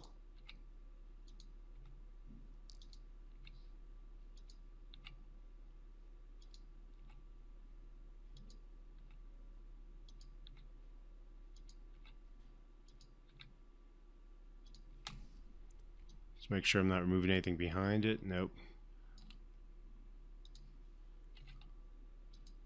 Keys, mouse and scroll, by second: 0.7 Delete, 1.6 click, 2.1 Delete, 3.1 click, 3.7 Delete, 4.7 click, 5.3 Delete, 7.3 click, 7.6 Delete, 8.7 click, 8.7 click, 10.4 Delete, 11.9 click, 12.3 Delete, 13.2 click, 13.6 Delete, 15.0 click, 15.3 Delete, 16.4-19.5 alt+drag, 21.7 Delete.